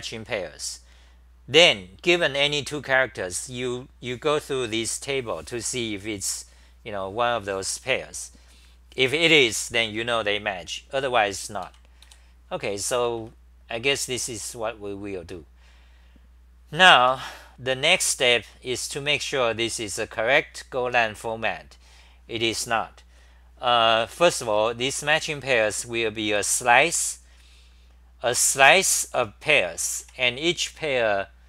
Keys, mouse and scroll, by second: 11.6 ctrl+g, 12.1 ,, 13.0 c, 13.2 c, 17.1 Home, 17.1-17.9 scroll up 5, 17.9 c, 18.2 c, 18.4 c, 19.2 6, 24.6 ctrl+g, 25.1-26.3 typing, 28.6 ctrl+g, 29.0 t, 29.1 t.